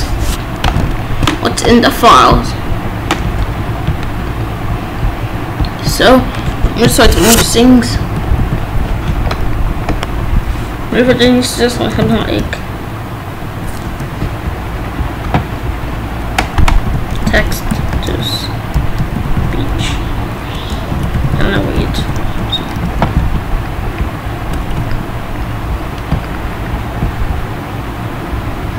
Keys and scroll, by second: 8.4 ctrl+a, 11.1 ctrl+a, 12.0 t, 12.4 e, 13.9 BackSpace, 16.8-18.6 typing, 20.5-22.7 typing, 23.0 ctrl+s, 24.6 ctrl+b.